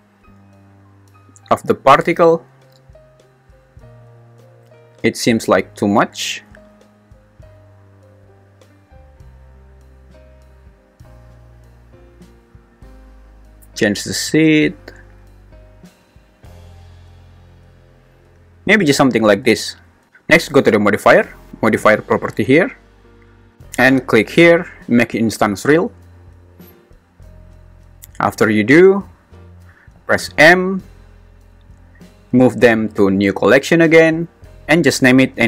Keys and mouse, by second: 1.3-12.3 drag, 13.5 click, 15.3 click, 25.9 click, 30.2 m.